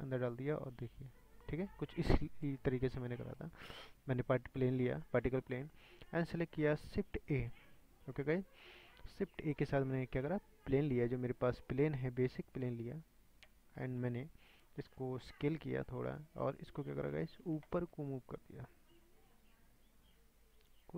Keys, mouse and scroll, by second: 3.8 click, 6.7 scroll down 4, 11.8 scroll up 4, 12.3 middle click, 12.6 scroll down 5, 13.4-13.8 scroll up 5, 13.8-15.4 shift+middle drag, 15.4 s, 16.8-17.4 scroll down 10, 18.3-20.9 drag.